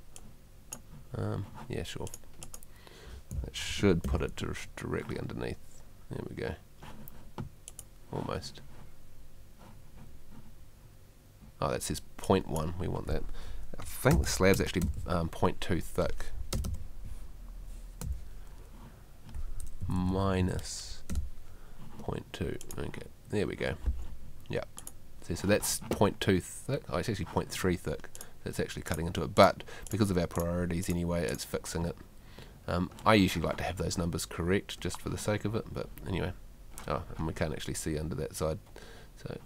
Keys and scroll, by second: 3.4 Escape, 14.1 space, 16.5 BackSpace, 18.0 2, 19.8 Left, 23.8 Escape.